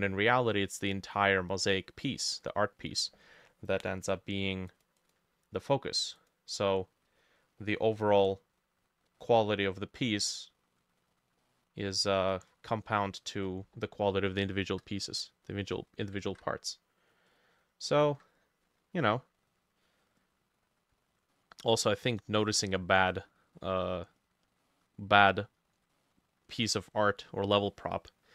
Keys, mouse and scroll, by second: 0.0 middle click, 0.5 middle click, 1.0 middle click, 1.6 middle click, 2.2 middle click, 5.0 double click, 7.2-7.7 scroll down 3, 7.7 middle click, 9.1 middle click, 11.0-11.4 scroll up 2, 11.4 middle click, 12.1 middle click, 12.5-12.9 scroll up 2, 12.9 middle click, 14.6 shift+click, 16.3 ctrl+z, 17.3 double click, 18.1 Escape, 21.4 middle click, 22.4 middle click, 23.6 middle click, 24.6 middle click, 26.0 middle click, 27.7 middle click.